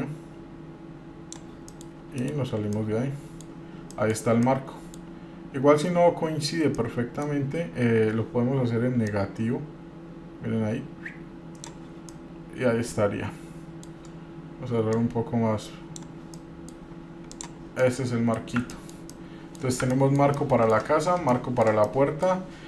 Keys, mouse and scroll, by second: 1.9 middle click, 2.4 KP_Divide, 3.0-3.7 middle drag, 3.8 scroll up 1, 4.1 middle click, 4.6-5.2 middle drag, 5.4-5.9 scroll up 1, 6.9 middle click, 9.3-11.8 drag, 12.3-14.1 middle drag, 15.1-16.2 drag, 16.5 middle click, 17.5 click, 17.8 scroll down 2, 18.0-18.5 middle drag, 18.9 middle drag, 19.3-19.8 middle drag, 20.1 middle drag, 20.6-21.0 middle drag, 21.5-21.8 shift+middle drag, 22.0 middle click.